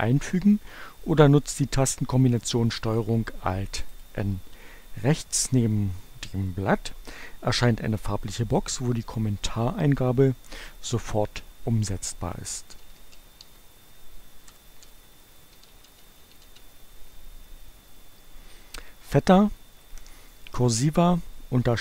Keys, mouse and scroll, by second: 3.7 click, 12.4-16.9 typing, 19.9 right click.